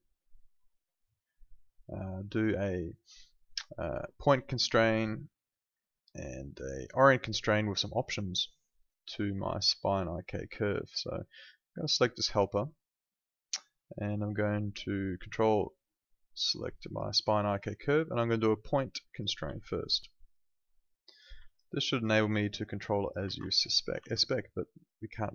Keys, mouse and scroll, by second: 9.5 click, 12.1 click, 16.8 ctrl+click, 19.1 click, 19.6 alt+click, 19.9 alt+right click, 20.2 click, 21.4 alt+click, 23.2 ctrl+z, 23.7 alt+right click, 23.9 e, 24.8 click.